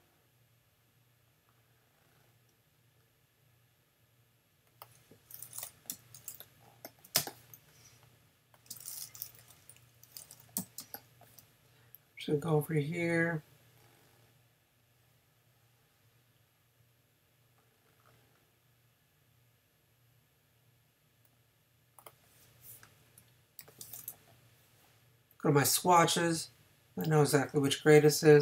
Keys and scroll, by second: 5.9 i, 10.6 n.